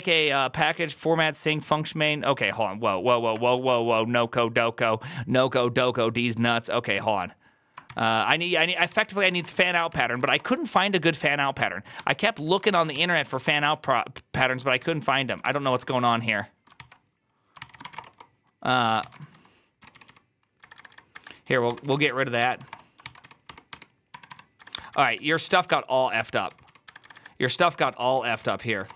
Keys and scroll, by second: 3.3 alt+f, 8.4 alt+{, 8.7 ctrl+c, 8.9-10.7 typing, 11.8-16.3 typing, 12.8 ctrl+c, 12.9 ctrl+c, 15.3 ctrl+c, 15.4 ctrl+c, 16.6 ctrl+c, 17.4 ctrl+c, 17.7-28.9 typing.